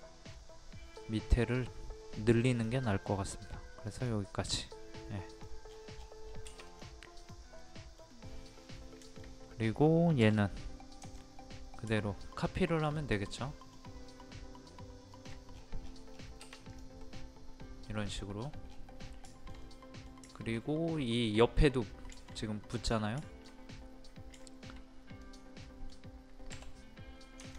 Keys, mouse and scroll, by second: 0.3 middle click, 1.2-2.3 scroll up 1, 2.5 click, 4.5 middle click, 5.4-6.1 scroll down 1, 6.1 scroll up 1, 6.2-6.6 scroll down 1, 6.7 click, 7.6 middle click, 8.3 scroll up 1, 9.1 shift+middle click, 10.2 m, 11.1 ctrl+click, 12.4 shift+middle click, 13.3 shift+middle click, 15.2 shift+click, 15.5-16.0 scroll down 2, 16.7 scroll down 1, 16.7 click, 17.0 middle click, 18.0 scroll down 1, 18.5 scroll up 1, 18.7 scroll down 1, 18.7 scroll up 1, 19.0 scroll down 1, 19.3 shift+middle click, 20.3 shift+middle click, 22.8 click, 23.2 shift+middle click, 24.4 shift+middle click, 25.2 click, 25.6-26.7 middle drag, 27.4 ctrl+click.